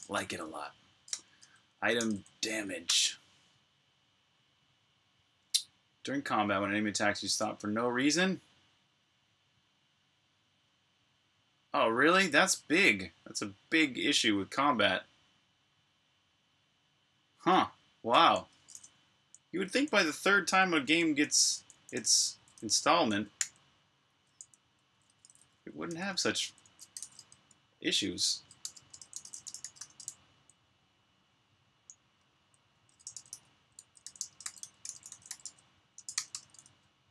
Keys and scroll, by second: 0.0-0.4 typing, 1.6-2.6 typing, 2.7 Return, 18.8-26.8 typing, 28.2-30.8 typing, 32.0-37.1 typing.